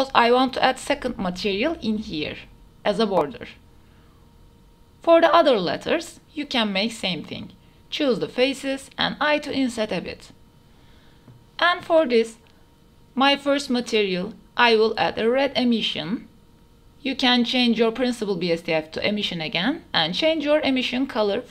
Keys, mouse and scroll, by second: 1.5 KP_3, 1.9 shift+middle click, 2.1 shift+middle drag, 2.3 alt+click, 2.6 click, 3.2 shift+middle drag, 4.1 drag, 4.3 click, 4.9-5.3 drag, 5.7 shift+drag, 6.2 shift+click, 6.4 shift+drag, 7.5 shift+click, 7.7 click, 8.1 shift+click, 8.3 shift+click, 8.4 shift+click, 8.9 i, 9.7 Tab, 12.3-14.5 drag, 14.0 s, 16.5-17.6 drag, 18.2 click.